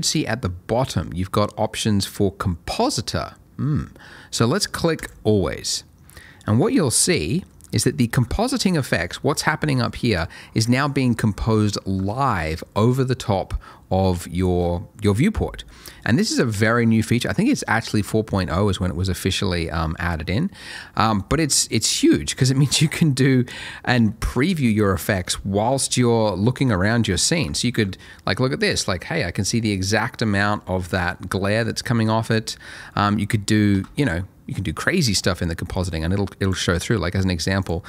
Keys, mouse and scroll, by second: 5.0 click, 6.5 middle click, 7.1 scroll up 1, 7.9 shift+middle click, 8.7 scroll down 1, 9.2 middle click, 10.1 scroll up 1, 10.6 middle click, 11.6 shift+middle click, 12.1-12.6 shift+scroll down 1, 20.7 middle click, 21.2 shift+middle click, 21.4-22.3 shift+scroll up 2, 22.3-23.5 scroll down 1, 23.5-24.1 scroll up 1, 24.9 middle click, 25.2-26.0 scroll down 1, 26.0 middle click, 26.7-27.1 scroll up 1, 27.1 middle click, 28.0 shift+middle click, 28.4-28.8 scroll down 1, 28.8 middle click, 33.3 middle click, 33.5 scroll up 1, 34.2 shift+a, 36.4 click.